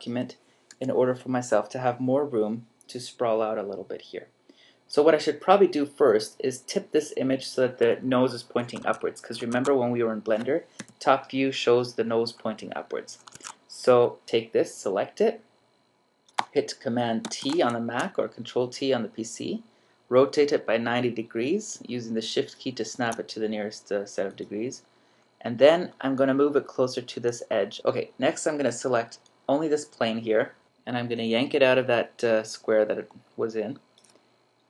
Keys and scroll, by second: 8.8 super+Tab, 13.6 super+Tab, 17.3 super+t.